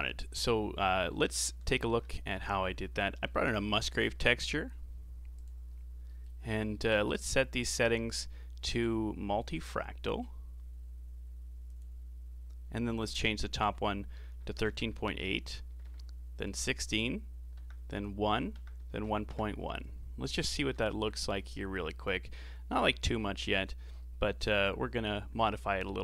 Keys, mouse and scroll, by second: 0.9 middle click, 1.8 shift+a, 5.8 scroll up 2, 6.0 middle click, 6.4 scroll up 4, 6.7-8.0 middle drag, 8.0-11.1 drag, 13.5-16.5 drag, 20.4 ctrl+shift+click, 21.5-22.7 drag, 22.7-26.0 middle drag.